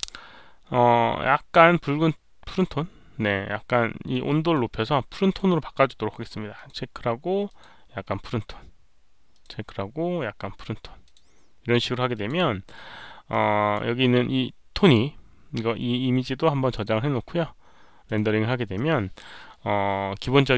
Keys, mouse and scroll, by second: 1.5-2.5 drag, 4.1-4.5 drag, 5.1 click, 6.5 click, 7.4 click, 9.3 click, 11.0 click, 12.1 click, 13.3 click, 16.7 click, 18.0 click.